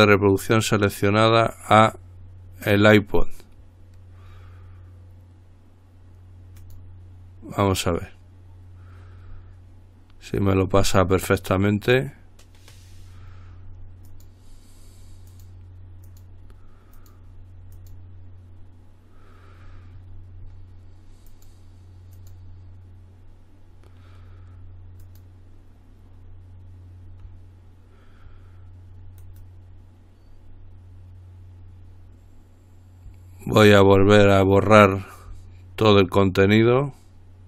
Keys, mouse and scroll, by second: 6.8 click, 11.4 click, 14.3 click, 15.5 click, 16.3 click, 17.2 click, 17.9 click, 21.5 click, 22.4 click, 25.3 click, 29.4 right click, 34.8 click.